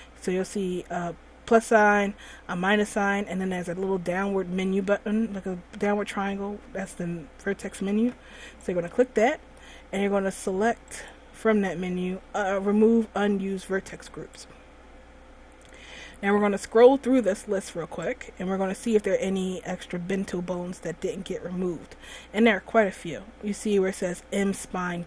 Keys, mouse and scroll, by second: 8.8 click, 11.1 click, 16.8-17.4 scroll up 4, 18.2 click, 24.3 click.